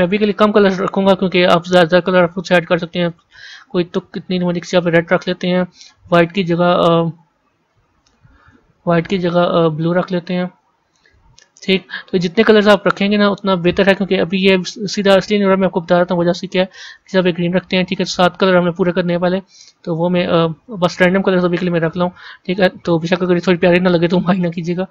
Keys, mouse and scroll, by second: 1.0-6.0 drag, 14.9-24.9 drag.